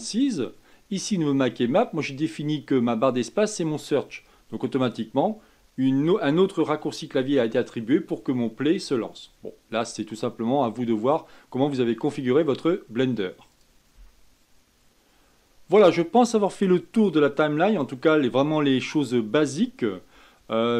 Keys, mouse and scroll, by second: 0.0-13.9 drag, 14.1 ctrl+space.